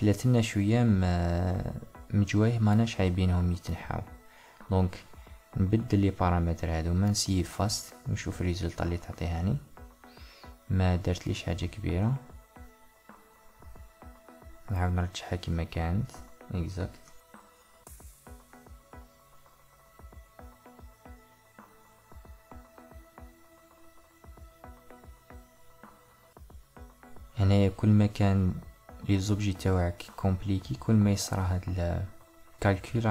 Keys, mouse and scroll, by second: 11.6-14.6 middle drag.